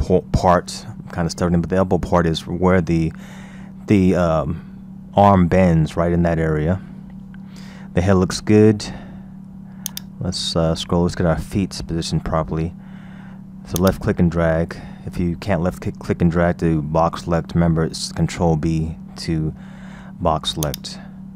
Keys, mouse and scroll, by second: 6.7-7.8 scroll down 3, 7.8-8.2 scroll up 1, 8.2-9.9 scroll down 3, 9.9-11.8 drag, 11.8-12.4 scroll up 2, 12.4-13.8 scroll down 1, 13.8 click, 20.7-21.3 drag.